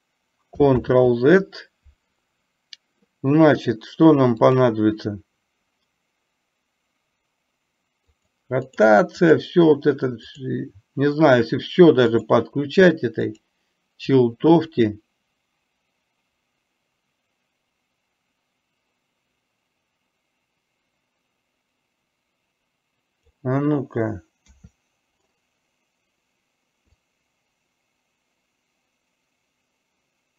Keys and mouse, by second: 0.9 ctrl+z, 4.6 click, 8.2 click, 8.7 click, 10.4 click, 12.4 click, 13.5 click, 14.9-23.4 drag, 27.1-30.3 drag.